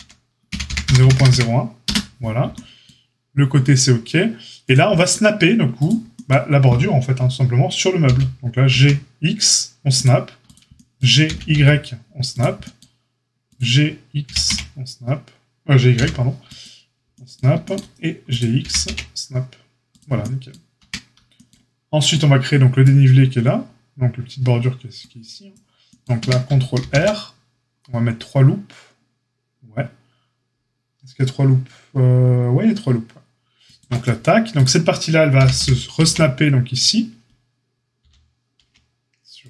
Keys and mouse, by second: 0.4 g, 4.6-5.8 drag, 8.0 g, 11.2 g, 13.4 click, 13.4-14.2 middle drag, 14.2 g, 18.6 g, 20.8 Tab, 26.1 Tab, 26.7 ctrl+r, 35.3-39.4 middle drag, 35.3 g.